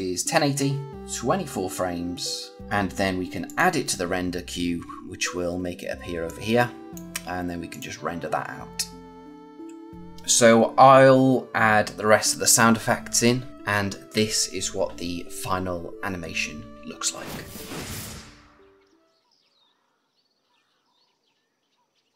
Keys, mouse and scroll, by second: 2.6 click, 3.3 click, 6.2 click.